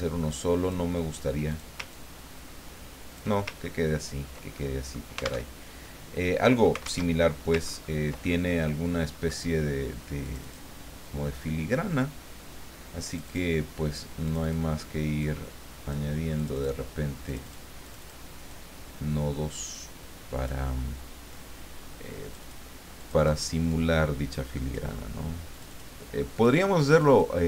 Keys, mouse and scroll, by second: 1.5 ctrl+click, 1.9-3.4 ctrl+drag, 3.4 ctrl+middle click, 3.7-4.4 ctrl+scroll down 2, 4.6 ctrl+middle click, 5.5 alt+Tab, 7.0 alt+Tab, 7.6-8.2 ctrl+scroll up 2, 8.2-10.0 ctrl+middle drag, 10.2 click, 13.1 click, 14.2 click, 15.2 click, 16.4 click, 17.3 click, 17.8 click, 18.5-20.6 drag, 22.2 click, 23.0 click, 23.7-25.0 drag, 25.5 click, 26.3 click, 26.9 click.